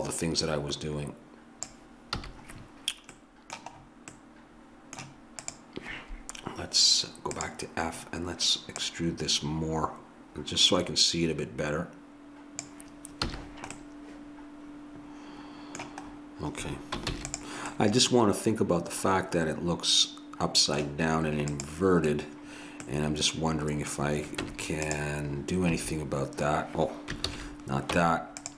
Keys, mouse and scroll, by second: 2.2 a, 3.2 middle click, 5.5 right click, 10.3 click, 13.3 a, 17.1 ctrl+s, 21.5-23.1 right drag, 24.4 Tab, 25.7 a, 27.3 ctrl+z, 28.0 Tab.